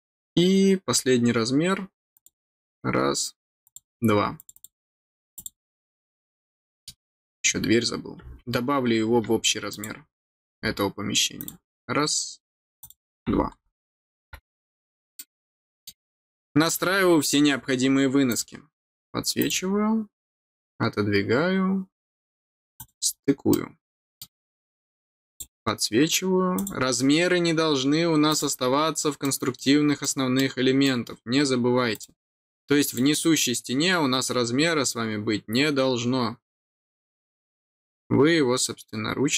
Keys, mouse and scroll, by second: 0.9 scroll down 1, 2.1 click, 3.6 click, 4.3 click, 4.5 click, 5.3 click, 6.5 middle click, 7.2-7.6 scroll down 2, 9.7 click, 11.3 click, 12.8 click, 13.8 scroll down 1, 15.0 scroll down 1, 15.1 middle click, 16.4 middle click, 18.2 click, 19.3 click, 22.7 click, 23.5 middle click, 24.3-24.6 scroll down 1, 25.2 click, 26.5 click, 28.2 click, 29.2 middle click, 30.0 middle click, 30.8 middle click, 31.9 click, 32.8 click.